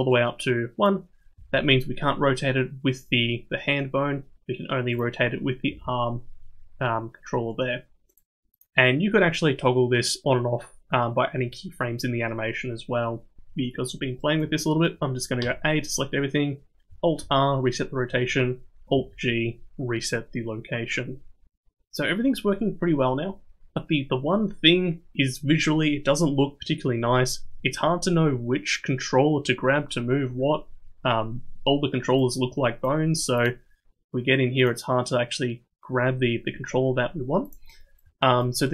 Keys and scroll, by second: 1.4 r, 5.7 r, 15.4 a, 17.2 alt+r, 19.0 alt+g.